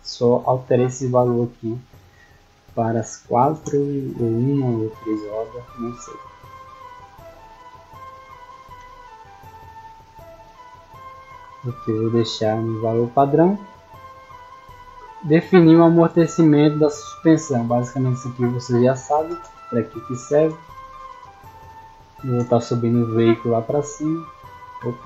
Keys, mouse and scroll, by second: 2.4 click, 4.4 click, 11.6-12.3 scroll down 4, 14.0-14.4 scroll down 2, 18.2 click, 20.2 click, 21.2 click, 22.2 click, 23.6-24.3 drag.